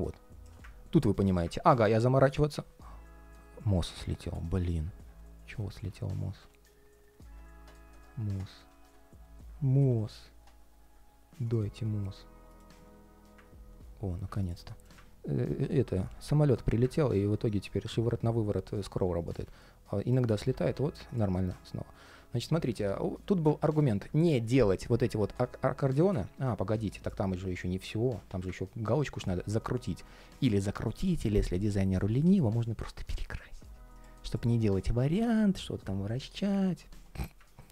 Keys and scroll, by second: 3.9 super+space.